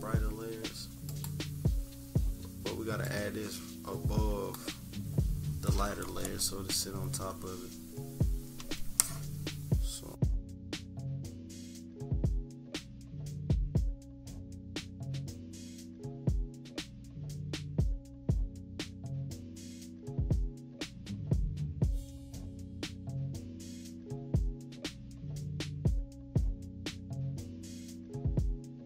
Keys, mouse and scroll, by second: 1.1 click, 4.5 click, 8.6 click, 10.1 click, 11.0 click, 11.7 -, 12.0 =, 12.0 =, 12.8-15.2 drag, 15.8 click, 16.7 -, 17.1 =, 17.7-18.7 drag, 18.8 -, 19.1 -, 19.3 =, 20.0-22.8 drag, 23.1-24.4 drag, 24.5 -, 24.8 =, 25.5-27.2 drag, 27.7 click, 28.4 click.